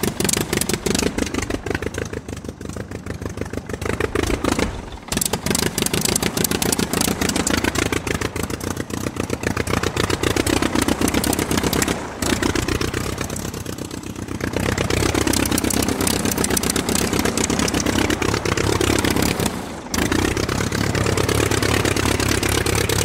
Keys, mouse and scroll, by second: 9.7 click, 11.1-16.0 drag, 16.2 click, 21.4 click, 22.9 click.